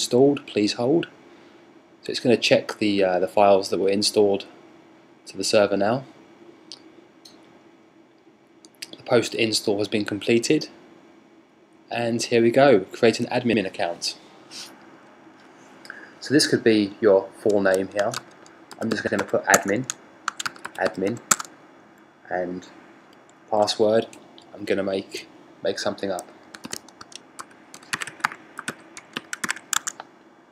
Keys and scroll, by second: 17.4-22.7 typing.